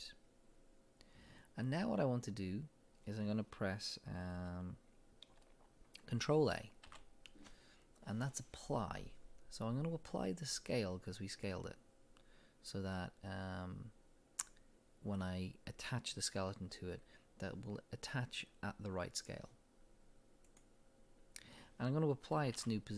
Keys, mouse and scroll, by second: 2.0-3.6 scroll down 2, 6.0-6.9 middle drag, 6.9 ctrl+a, 22.6 ctrl+a.